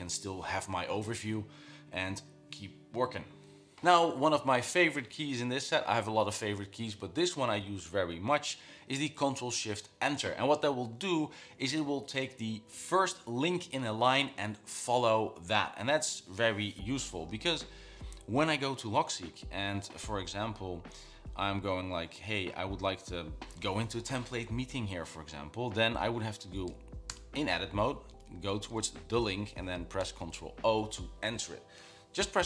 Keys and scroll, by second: 20.8 Down, 22.4 Escape, 22.8 Down, 23.2 Up, 28.4 Left, 28.5 Left, 28.7 Left, 30.3 ctrl+o.